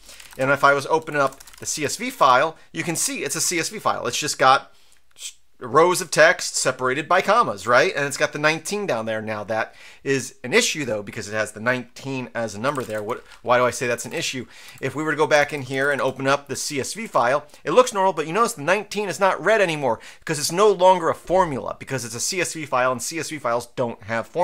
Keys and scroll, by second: 0.0-1.9 typing, 1.0 Tab, 2.2 Return, 12.5-13.4 typing, 14.0 Up, 14.1 Up, 14.6 Up, 15.3-16.4 typing, 17.0 Return.